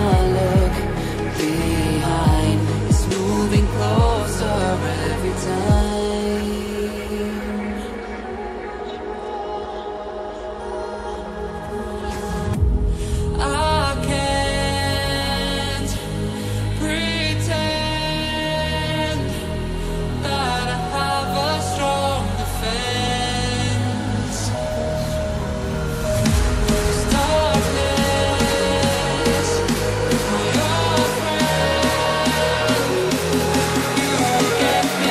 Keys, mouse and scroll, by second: 0.2 click, 0.4 double click, 1.1 typing, 2.4 click, 2.9 BackSpace, 4.4 click, 4.9-5.3 typing, 6.5 click, 7.1-7.9 typing, 8.5 click, 9.1-9.5 scroll down 1, 9.9 scroll up 1, 10.0 click, 10.1 double click, 11.2 typing, 12.7 Right, 13.0-14.0 typing, 14.7 click, 15.3 typing, 16.8 click, 17.4 typing, 18.8 click, 19.4 BackSpace, 20.7 scroll down 1, 21.4-21.8 scroll down 1, 21.8 click, 21.9 scroll up 1, 22.8 click, 24.3 double click, 24.5 Delete, 24.9 scroll down 1, 25.9 click, 26.7 scroll up 1, 27.2 click, 27.9 scroll down 1, 28.4 scroll up 1, 29.0 click, 34.4 shift+click.